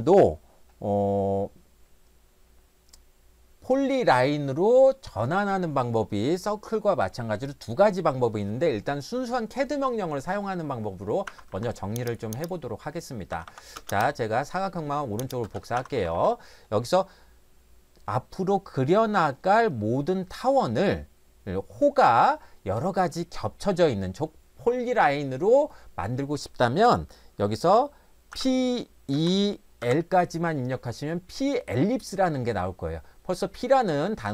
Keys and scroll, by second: 11.2 Escape, 11.5 Escape, 13.3-13.8 typing, 15.4 space, 15.8 Escape, 16.0 Escape, 16.2 Escape, 28.3 p, 29.2 e, 29.8 l.